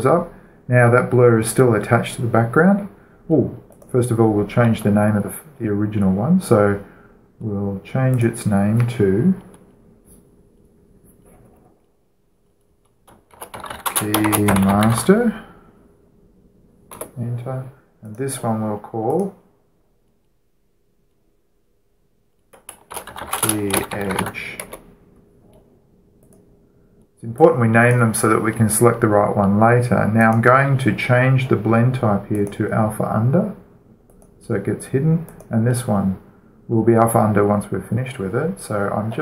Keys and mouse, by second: 4.6-6.4 right drag, 6.4-9.0 middle drag, 9.0-10.8 drag, 14.2-15.8 typing, 17.8 Return, 18.9-21.8 drag, 20.0 right click, 23.8-25.0 typing, 25.5 Return, 27.2-30.6 drag, 31.0-32.6 right drag, 32.6-33.2 middle drag, 33.2-36.6 drag, 36.1-37.7 right drag, 37.8 click.